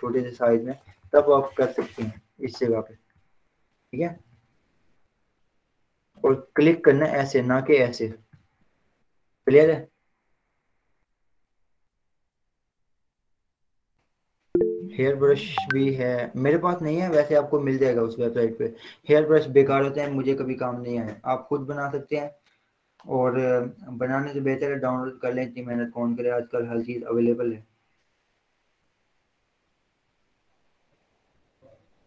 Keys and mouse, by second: 0.5-2.9 typing, 3.1 click, 4.3 ctrl+z, 6.3 ctrl+z, 6.8 click, 9.0 ctrl+z, 9.9 v, 11.6 click.